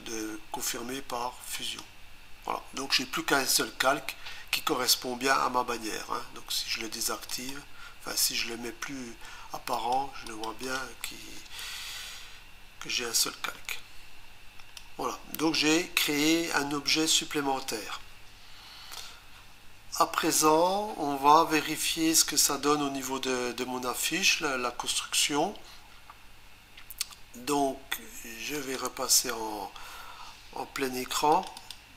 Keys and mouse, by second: 1.5 click, 7.3 click, 9.8 click, 10.3 click, 10.6 click, 10.8 double click, 13.2 click, 28.6 click.